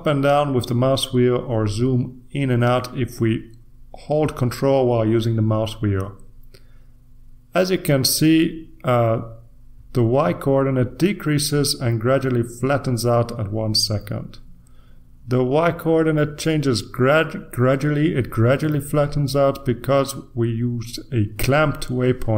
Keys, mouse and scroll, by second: 1.5-2.6 scroll down 1, 2.6-3.2 scroll up 2, 3.2 scroll up 1, 3.4-4.0 scroll down 2, 4.0-5.6 scroll down 1, 5.6-6.1 scroll up 2, 6.1 scroll up 1, 6.5-7.7 ctrl+scroll down 2, 7.7-9.7 ctrl+scroll up 1, 9.7-10.4 scroll down 1, 10.4-11.1 ctrl+scroll up 2, 11.1-13.2 ctrl+scroll down 3.